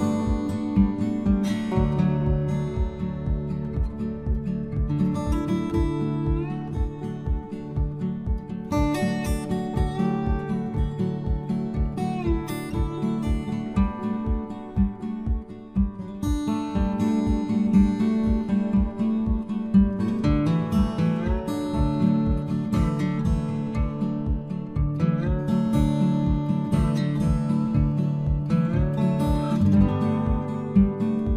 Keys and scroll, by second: 16.9 Return, 23.0 Return.